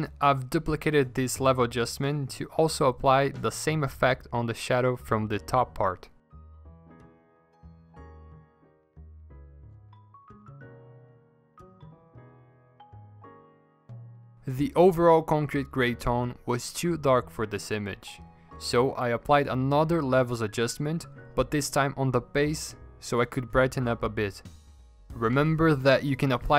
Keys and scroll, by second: 2.1 ctrl+alt+g, 8.3 v, 10.5 Delete, 10.8 ctrl+z, 12.2 3, 13.5 5, 14.0 5, 15.4 5, 23.9 ctrl+alt+g.